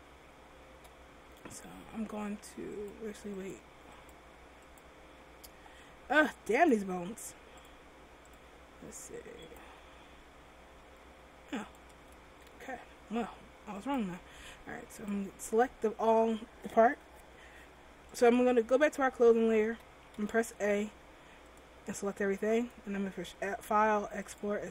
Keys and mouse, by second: 3.0-6.6 drag, 6.6 middle click, 8.6-9.7 drag, 9.7 right click, 9.8 r, 11.8 right click, 13.0 ctrl+z, 18.3-19.8 drag, 19.8 a, 20.3 a, 21.6-23.3 drag.